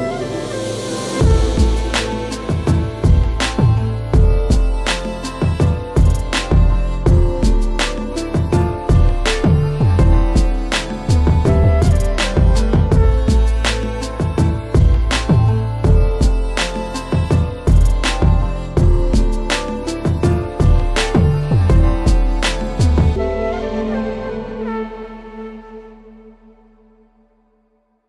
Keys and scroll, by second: 1.9 Return, 7.7 Return, 8.8 ctrl+j, 16.6 ctrl+g, 24.4 space, 26.5 shift+Return.